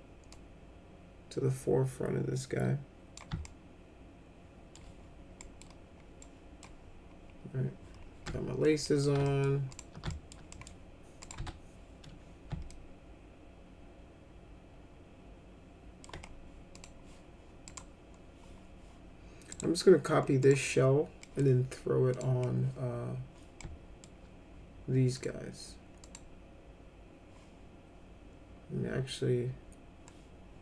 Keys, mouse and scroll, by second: 0.2-3.1 drag, 3.4-4.7 alt+middle drag, 5.3 middle click, 6.1 middle click, 8.2 alt+middle click, 8.8 middle click, 9.2 alt+middle click, 9.7 alt+click, 10.0 alt+middle click, 10.5 middle click, 11.2 click, 11.3 F4, 12.7-16.0 alt+middle drag, 16.7 click, 17.6 click, 19.5 right click, 20.4 click, 21.2 middle click, 22.1 click, 23.5 alt+middle click, 25.1 click, 26.0 click.